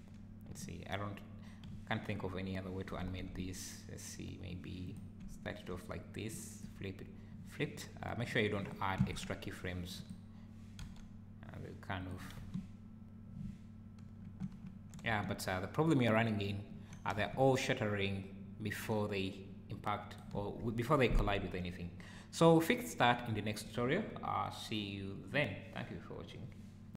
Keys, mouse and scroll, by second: 0.6 `, 1.7 `, 3.0 r, 5.3 `, 6.3 click, 8.3 click, 8.6 click, 9.0 x, 10.0 click, 10.8 g, 12.4 space, 14.3 Escape, 14.7 `, 15.1 space, 16.7 Escape, 18.7 Escape.